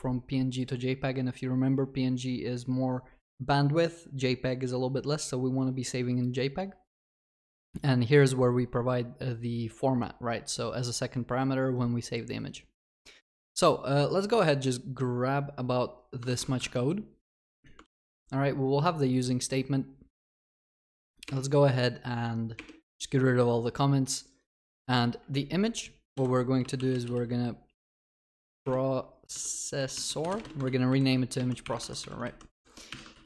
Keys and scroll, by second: 17.9 ctrl+v, 30.7 ctrl+w, 30.9 ctrl+c, 31.8 ctrl+w, 32.0 ctrl+v, 33.1 ctrl+w.